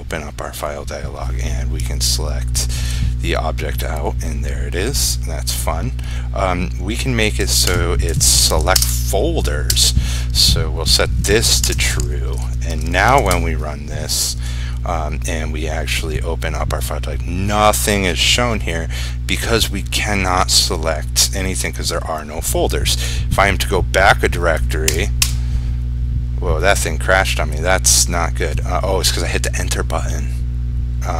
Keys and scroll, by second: 8.9 ctrl+space, 12.5 ctrl+s, 13.3 ctrl+r.